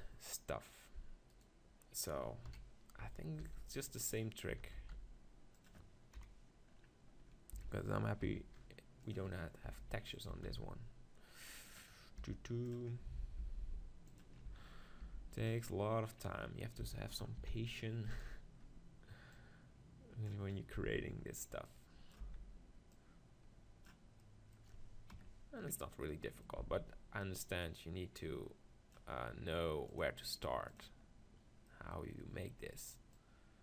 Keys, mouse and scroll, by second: 1.3-3.1 drag, 2.5 KP_1, 3.4 shift+d, 4.5 s, 5.7 click, 6.2 KP_7, 7.5 s, 9.0 middle click, 9.1-10.9 drag, 9.7 g, 10.3 s, 12.3 g, 13.4 g, 14.2-17.3 drag, 14.5 z, 15.1 g, 16.8 s, 18.2-24.2 drag, 20.7 z, 22.2 z, 24.2 middle click, 26.6 z, 28.3-29.5 drag, 29.8-31.7 drag, 31.7-33.1 middle drag, 33.1-33.6 drag.